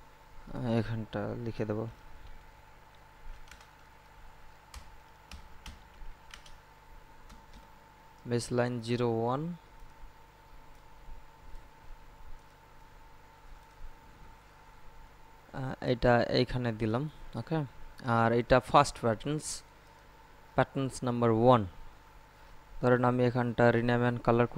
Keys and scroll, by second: 1.5-3.4 typing, 4.6-7.9 typing.